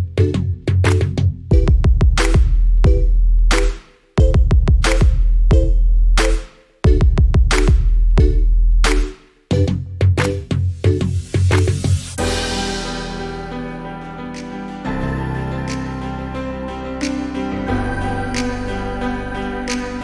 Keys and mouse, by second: 0.0 click, 0.3 middle click, 0.5 middle click, 0.8 shift+d, 0.9 click, 1.0 click, 1.2 click, 1.3 middle click, 1.4 click, 1.5 click, 1.9 KP_0, 2.0 space, 3.2 click, 3.4 click, 3.8 click, 4.5 click, 6.0 middle click, 6.1 click, 6.5 space, 6.6 click, 7.1 space, 7.4 click, 7.5 middle click, 7.6 click, 8.0 click, 8.7 shift+d, 8.8 click, 9.1 middle click, 9.3 click, 9.5 click, 10.0 space, 10.1 space, 10.2 click, 10.5 middle click, 10.6 click, 10.8 space, 10.9 space, 11.0 click, 11.7 Delete, 12.2 ctrl+space, 12.5 click, 13.1 middle click, 13.3 middle click, 14.1 click, 14.2 shift+a, 14.8 click, 15.0 click, 15.2 click, 15.7 ctrl+shift+click, 15.9 click, 16.2-16.9 ctrl+z, 16.4 middle click, 17.0 middle click, 17.0 click, 17.3 shift+a, 17.8 click, 17.9 click, 18.1 click, 18.4 click, 18.6 click, 18.7 click, 18.9 click, 19.0 click, 19.1 ctrl+z, 19.2 ctrl+z, 19.3 ctrl+z, 19.4 click, 19.6 click.